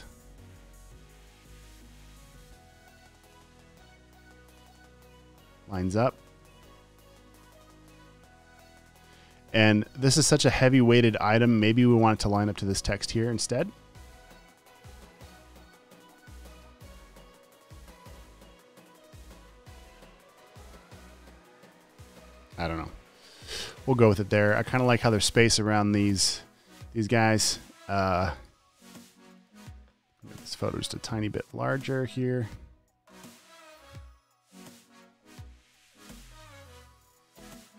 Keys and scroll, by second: 6.5 super+;, 14.9 super+t, 16.5 v, 17.6 super+t, 19.8 v, 22.2 v, 23.4 super+s, 30.6 super+t, 36.0 v.